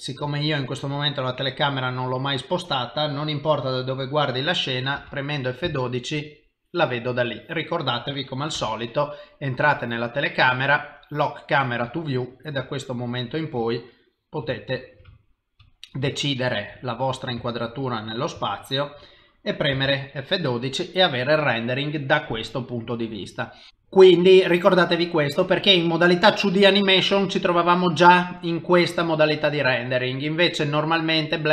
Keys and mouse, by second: 0.4 middle click, 0.9 middle click, 2.9 middle click, 3.1 ctrl+middle click, 5.2 F12, 7.7 middle click, 8.5 KP_0, 9.7 click, 10.9 click, 11.9 middle click, 12.7 ctrl+middle click, 13.6 ctrl+middle click, 13.7 shift+middle click, 14.6 ctrl+middle click, 15.1 middle click, 15.7 middle click, 16.1 shift+middle click, 16.7 middle click, 17.5 shift+middle click, 17.9 middle click, 18.5 shift+middle click, 20.0 F12, 20.5 s, 23.7 click, 27.0 click, 30.7 click.